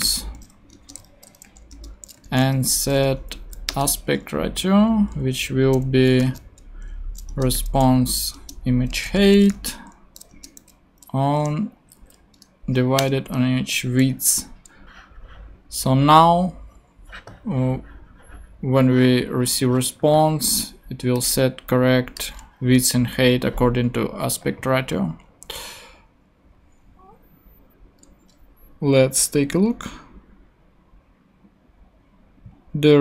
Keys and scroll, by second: 0.0-0.6 typing, 0.7 Return, 1.1 super+Right, 1.4 super+;, 1.7 Return, 1.9-2.9 typing, 3.4 Down, 3.7 Return, 6.0-10.6 typing, 7.4 Return, 8.3 Return, 10.3 Return, 11.8 Down, 13.4 super+Return, 13.5 super+Right, 14.2 super+;.